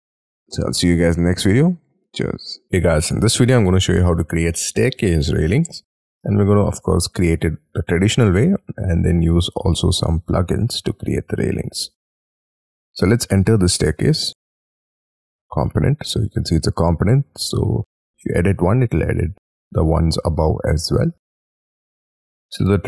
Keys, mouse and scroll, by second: 0.1 middle click, 0.7 scroll up 2, 1.1 scroll down 4.